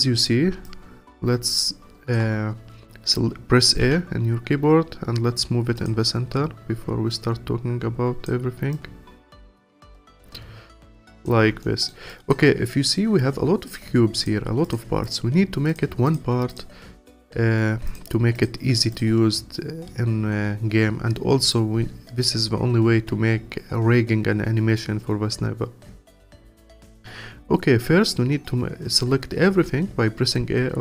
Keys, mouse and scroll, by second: 0.2-0.6 scroll down 1, 0.6-3.8 alt+drag, 3.8 a, 5.8-7.3 drag, 8.7 click, 9.5-11.2 alt+drag, 11.6 alt+middle click, 12.1 alt+click, 12.6-13.7 scroll up 1, 13.7 click, 14.1 click, 14.6 click, 15.0 click, 15.7 click, 16.0 click, 16.5 click, 17.1 click, 17.9 click, 18.3 click, 18.9 click, 25.6-26.3 scroll down 2, 26.3-28.1 scroll down 4, 28.1 scroll up 5, 28.6-29.5 scroll down 3, 29.5 a, 30.4-30.8 scroll up 4.